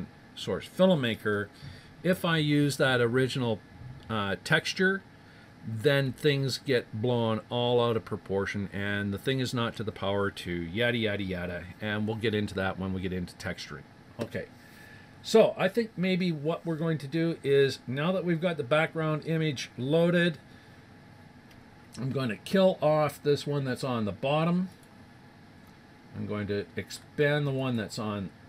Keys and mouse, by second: 24.7-26.7 drag, 27.6-28.4 drag.